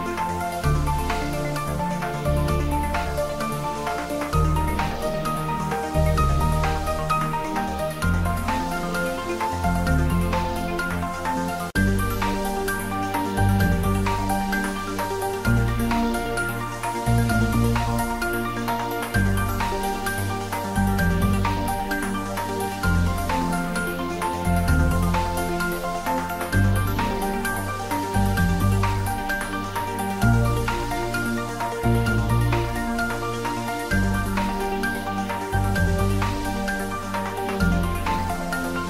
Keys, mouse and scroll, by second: 0.4 ctrl+z, 0.8 middle click, 1.9-4.3 ctrl+middle drag, 4.3 ctrl+l, 5.9 click, 7.5 ctrl+middle click, 9.1 ctrl+l, 10.2 click, 10.9 ctrl+s, 11.0 shift+middle click, 11.1 shift+middle click, 11.5-13.2 ctrl+middle drag, 13.2 click, 13.8 shift+click, 14.2-15.7 shift+middle drag, 15.7 shift+right click, 16.2 shift+a, 20.2 click, 20.3 click, 20.6-30.4 typing, 21.4 click, 22.4 click, 22.6 shift+middle click, 23.8 click, 25.7 click, 26.6 click, 27.7 click, 27.9 ctrl+middle click, 29.0 click, 29.6 click, 30.8 click, 35.4-36.9 typing, 36.0 click, 37.4 click, 37.6 ctrl+middle click, 38.3 shift+middle click.